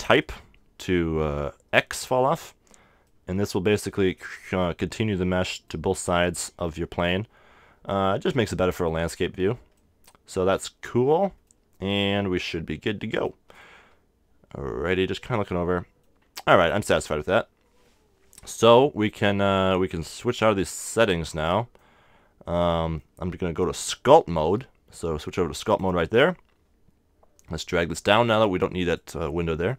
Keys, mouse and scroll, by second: 0.6-2.4 drag, 3.0-13.3 middle drag, 13.5-15.5 middle drag, 16.6-18.5 right drag, 20.9-22.8 middle drag, 23.9-25.8 drag, 27.6-29.4 drag.